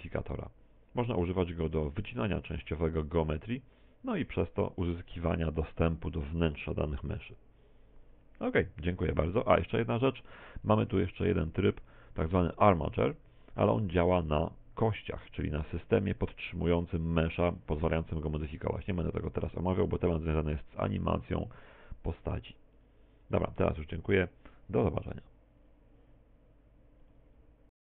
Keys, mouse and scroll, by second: 0.1 middle click, 1.8 middle click, 3.0 middle click, 11.3 click, 22.8 click.